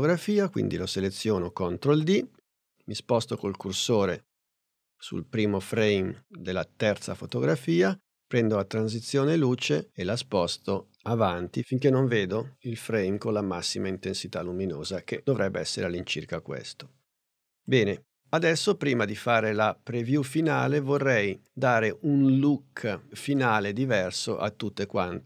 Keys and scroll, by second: 1.9 super+d.